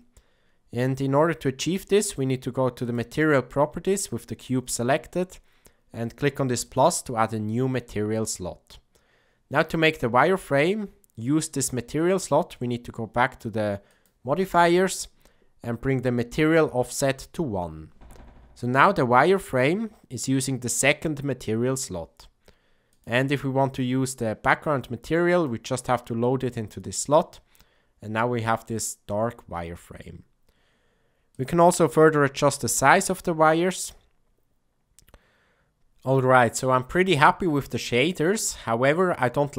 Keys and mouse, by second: 6.6 click, 13.9 click, 17.2 click, 20.3 click, 22.9-25.4 drag, 31.3 click, 33.2-35.8 shift+drag, 37.7 click.